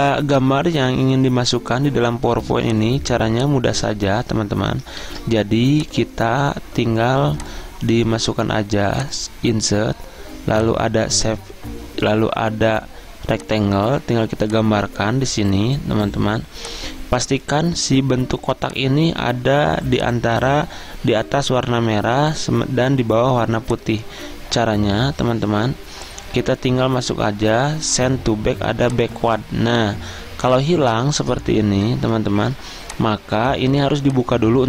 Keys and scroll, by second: 5.1 ctrl+z, 32.4 ctrl+z.